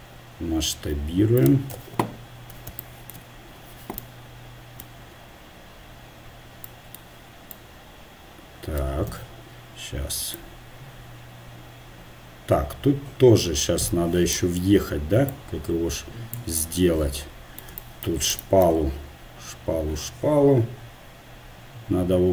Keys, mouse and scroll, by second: 1.8 KP_0, 1.8 KP_1, 9.1 KP_1, 15.3-17.3 drag, 18.3-20.5 right drag.